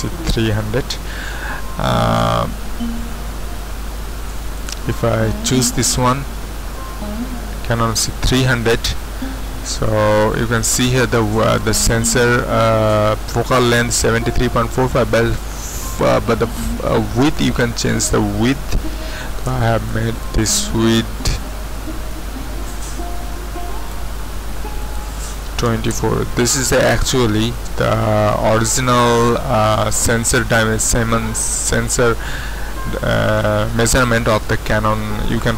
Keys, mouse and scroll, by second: 5.8-8.1 drag, 17.4 click, 19.2 KP_5, 19.7 KP_0, 19.8 Return, 22.6-24.6 drag, 25.4 KP_2, 25.9 KP_4, 26.0 Return.